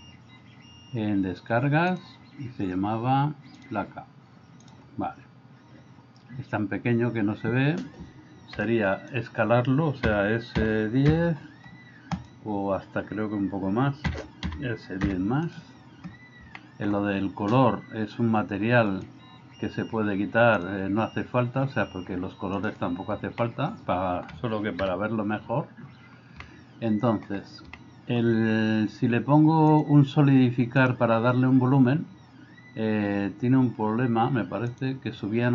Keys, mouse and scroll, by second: 8.6 b, 10.1 s, 14.1 s, 16.6 middle drag, 22.6 click, 23.5-24.3 middle drag, 24.9 KP_0, 26.5-27.3 shift+middle drag, 27.8-28.2 shift+middle drag, 29.7 click, 30.9-34.9 drag.